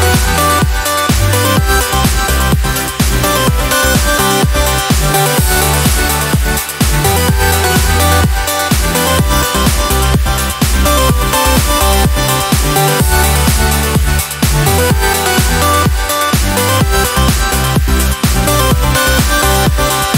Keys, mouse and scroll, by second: 2.2 8, 4.5 8, 7.1 8, 8.8 click, 11.7 click, 14.6 click, 15.9-17.1 drag, 17.1 click, 18.3 click, 19.4 ctrl+z.